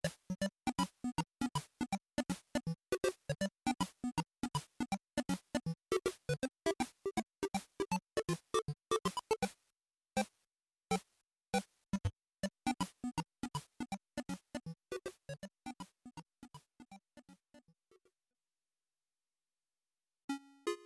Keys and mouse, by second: 7.9-9.2 drag, 11.7-20.8 drag.